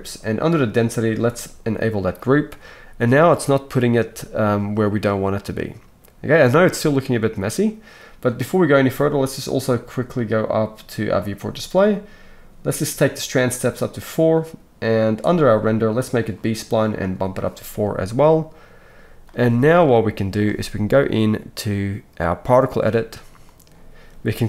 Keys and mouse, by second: 16.2-16.9 middle drag, 16.9-24.4 drag.